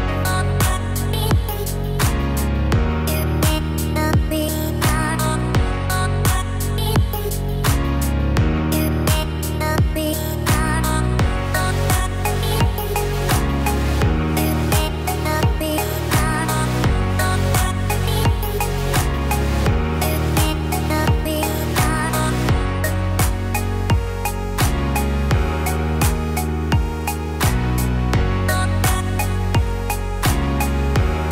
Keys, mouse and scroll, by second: 4.9 /, 6.3 click, 6.4 click, 7.4 ctrl+b, 12.1 ctrl+z, 12.6 ctrl+z, 13.5 ctrl+z, 14.0 ctrl+z, 15.6 ctrl+r, 19.3 ctrl+r, 23.5 click, 23.7 click, 24.7 ctrl+b, 27.1 Tab, 27.5 click, 27.9-29.0 scroll down 3, 28.2 middle click, 29.0 middle click.